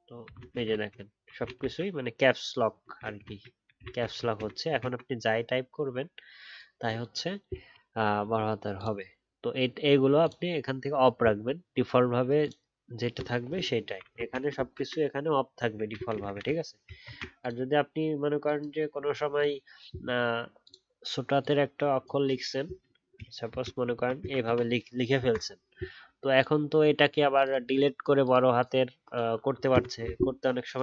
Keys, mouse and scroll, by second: 17.0 ctrl+a, 23.5 shift+t.